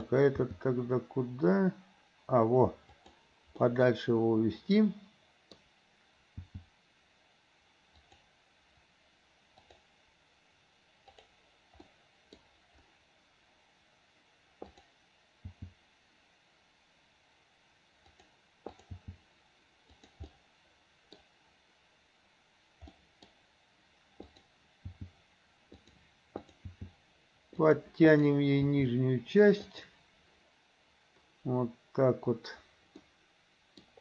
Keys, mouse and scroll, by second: 0.0 click, 0.5 g, 3.7-5.6 middle drag, 6.5 g, 9.7 click, 11.1 click, 11.9-12.5 middle drag, 14.8 click, 15.6 g, 18.8 click, 19.1 g, 20.4-21.2 middle drag, 23.0 scroll up 1, 23.1 middle click, 24.3 click, 25.0 g, 26.5 click, 26.8 g, 28.1 click, 28.6 g, 33.1 middle click, 33.1 scroll up 1.